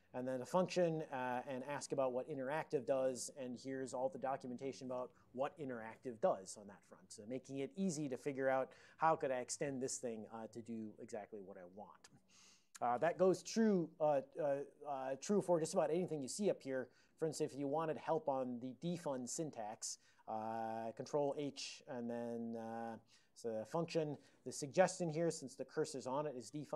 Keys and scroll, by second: 2.6 Return, 2.6 alt+o, 3.0 ctrl+n, 3.2 ctrl+n, 14.4 alt+o, 15.4 ctrl+p, 16.8 ctrl+p, 17.2 ctrl+a, 17.4 ctrl+f, 21.4 ctrl+h.